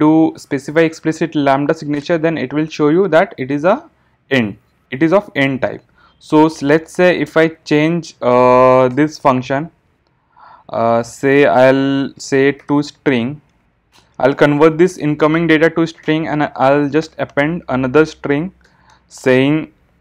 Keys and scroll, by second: 13.9 Return.